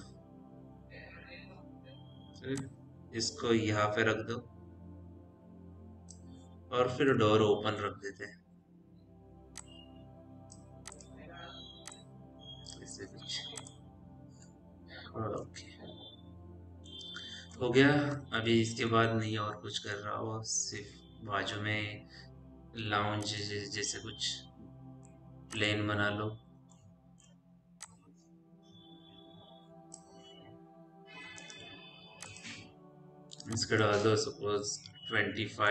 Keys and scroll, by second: 7.6 p, 8.4 e, 18.7 ctrl+s, 35.3-35.7 typing.